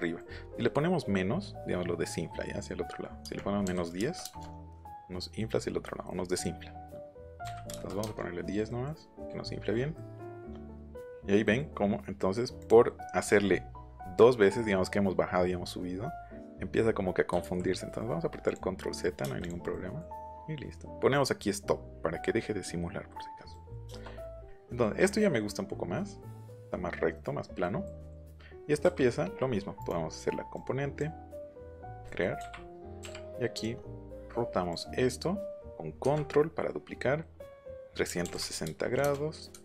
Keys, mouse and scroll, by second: 3.1 KP_Subtract, 3.6 KP_1, 4.0 KP_0, 4.2 KP_Enter, 7.4 KP_1, 7.7 KP_0, 8.0 KP_Enter, 12.5 click, 17.4 ctrl+z, 18.4 click, 19.4 click, 19.7 middle click, 20.3 middle click, 23.5 middle click, 23.8 shift+middle click, 24.3 middle click, 25.0-26.4 middle drag, 27.6 middle click, 28.0 middle click, 29.7 right click, 30.5 right click, 31.7 click, 33.0 Up, 33.5 click, 34.6 click, 35.7 middle click, 38.1 KP_3, 38.2 KP_6, 38.6 KP_0, 39.0 KP_Enter, 39.5 KP_Divide.